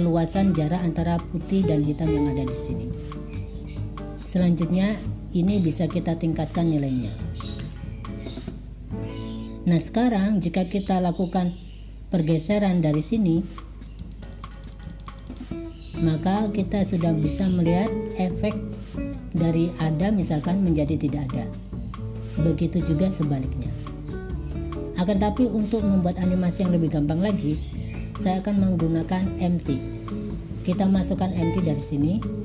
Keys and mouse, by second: 0.1 click, 3.2 click, 5.6-8.5 drag, 10.0 click, 10.9 click, 14.0 click, 14.2 click, 14.7 click, 15.4 click, 19.3-24.7 drag, 31.9-32.4 drag.